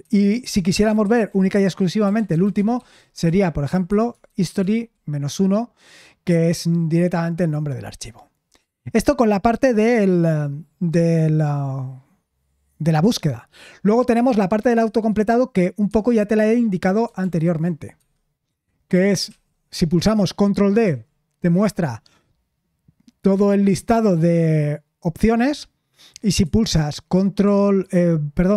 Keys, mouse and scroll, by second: 1.0-4.9 typing, 17.2 super+l, 20.8 ctrl+d, 26.4 Escape.